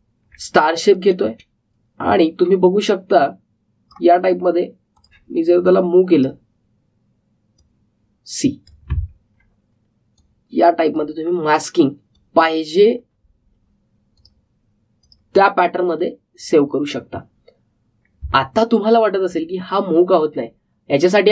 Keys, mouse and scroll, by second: 0.8-1.3 alt+scroll up 1, 1.8-10.0 drag, 10.0 alt+scroll down 1, 11.1-19.4 drag, 19.4-19.8 alt+scroll up 1, 20.3 alt+scroll down 1.